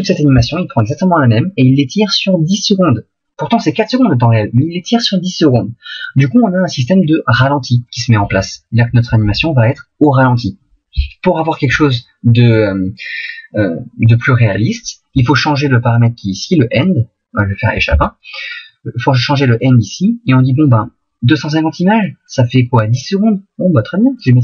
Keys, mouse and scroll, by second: 17.9 Escape.